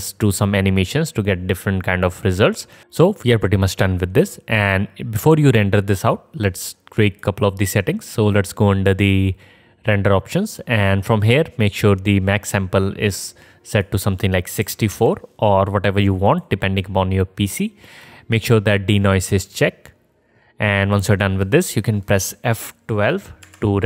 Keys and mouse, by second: 7.2 click, 7.2 middle click, 7.2 right click, 13.9-16.6 drag, 13.9-16.6 middle drag, 13.9-16.6 right drag.